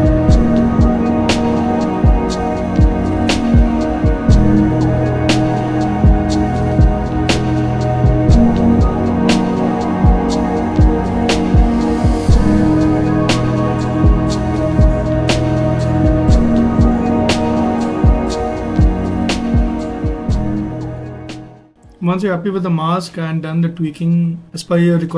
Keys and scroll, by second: 3.6 ctrl+alt+z, 4.1 ctrl+alt+z, 5.6 ctrl+alt+z, 8.9 ctrl+z, 9.7 ctrl+z, 10.6 ctrl+z, 11.3 z, 11.9 z, 13.0 z, 19.3 ctrl+z.